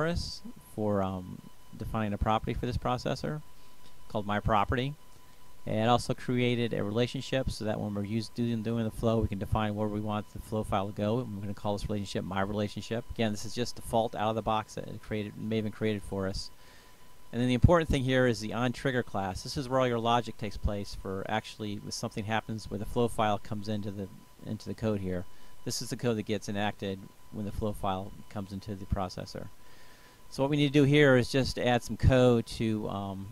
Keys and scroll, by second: 26.7 Return, 27.7 space.